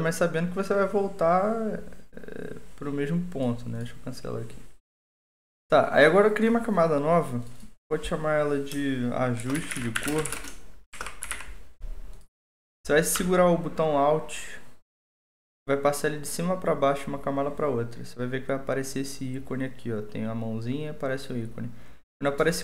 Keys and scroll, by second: 9.1-11.8 typing.